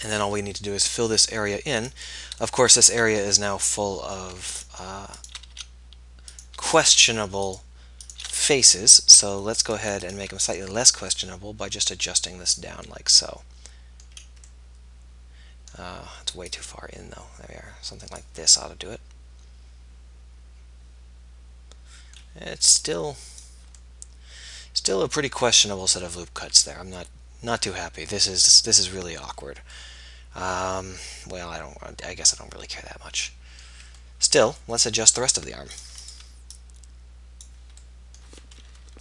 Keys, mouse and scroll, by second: 1.9-5.2 middle drag, 5.6 f, 8.4 f, 8.8-13.0 middle drag, 13.4 middle click, 14.8 middle click, 15.2-16.6 middle drag, 19.0 middle click, 21.2 middle click, 21.6 middle click, 23.7 click, 23.9-25.5 middle drag, 29.9-31.0 middle drag, 31.1 middle click, 31.4 middle click, 33.5 middle click, 34.5 middle click, 36.5-38.2 middle drag, 38.8 KP_1.